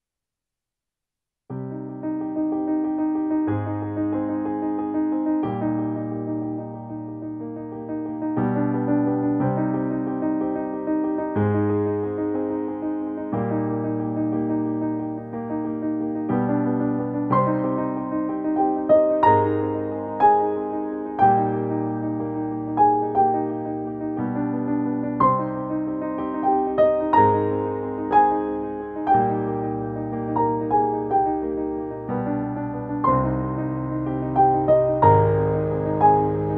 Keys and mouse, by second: 4.0 click, 6.6-9.4 drag, 15.3-15.8 typing, 20.2 Return, 22.5 click, 24.7 ctrl+j, 25.8 click, 28.1 click, 33.5 click.